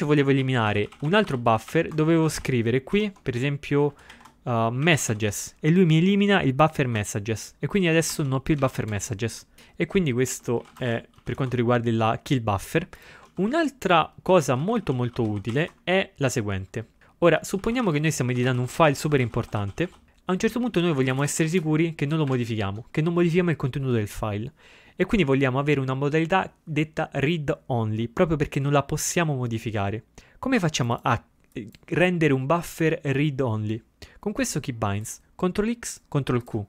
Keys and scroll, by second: 0.4 ctrl+f, 0.5-2.3 typing, 4.7-5.8 typing, 7.9 ctrl+x, 8.2 ctrl+b, 8.6 ctrl+x, 8.8 o, 10.2-11.8 typing, 13.4 ctrl+x, 13.6 ctrl+f, 14.2-16.1 typing, 17.6-19.8 typing, 21.3 typing.